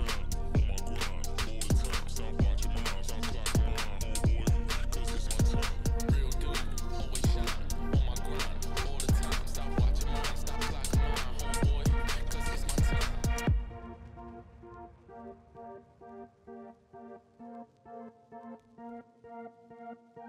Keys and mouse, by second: 4.8 click, 5.6-8.2 drag, 8.9-9.3 shift+drag, 11.8-13.6 drag, 14.9 middle click, 15.1 click, 15.9 click, 19.4-19.8 drag.